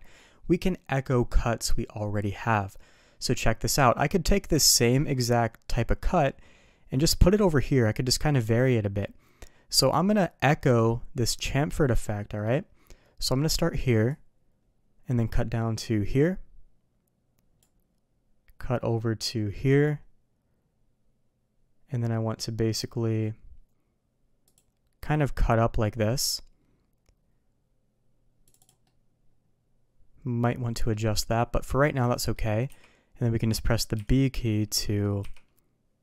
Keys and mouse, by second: 14.1-17.6 drag, 28.8-36.0 middle drag.